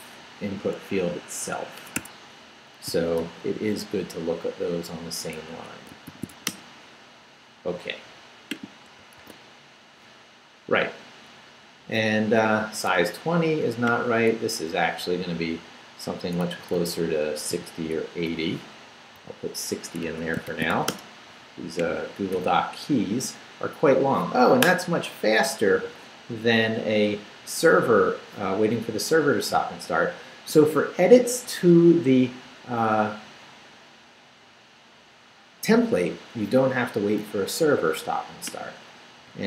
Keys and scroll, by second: 1.8 Escape, 2.9 i, 3.2 BackSpace, 4.2 BackSpace, 5.5 Escape, 5.8-6.8 typing, 9.2 super+r, 14.5 Right, 15.1 Right, 16.4 Right, 17.5 i, 18.3 BackSpace, 19.1 6, 20.0 Escape, 20.2-21.2 typing, 22.3 super+r, 39.1 Down.